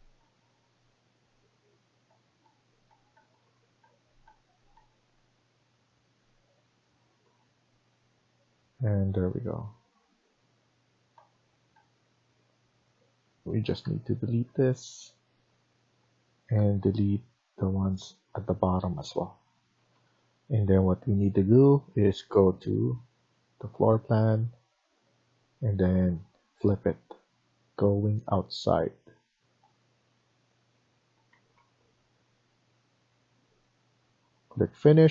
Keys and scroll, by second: 0.1 Tab, 1.3 Tab, 1.6 Tab, 2.0 Tab, 2.3 Tab, 2.8 Tab, 3.1 Tab, 3.3 Tab, 3.7 Tab, 4.1 Tab, 4.7 Tab, 5.1 Tab, 9.7 Escape, 9.9 Escape, 11.1 Tab, 11.7 Tab, 12.1 Tab, 13.7 Delete, 16.5 Delete, 19.7 Escape, 19.9 Escape, 31.3 Escape, 31.5 Escape.